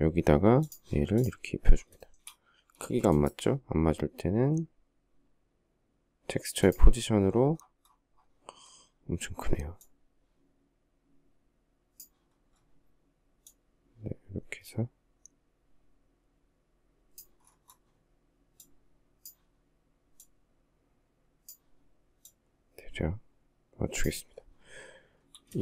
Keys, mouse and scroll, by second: 1.6 shift+middle click, 2.4 space, 25.2 shift+middle click.